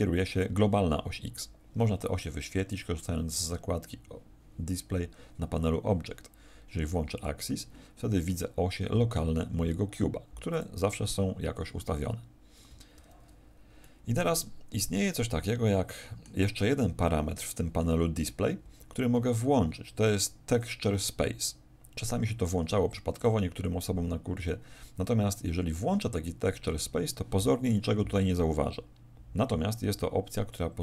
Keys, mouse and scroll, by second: 2.6 click, 7.1 click, 8.2 middle click, 9.4 r, 10.5 click, 12.9 alt+r, 13.8 middle click, 23.1 click.